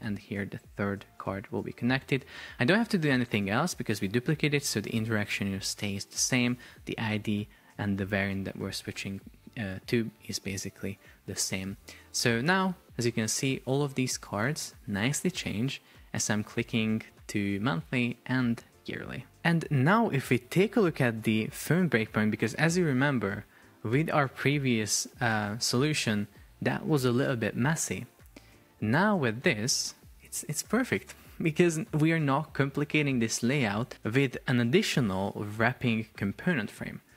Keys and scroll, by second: 10.3 super+p.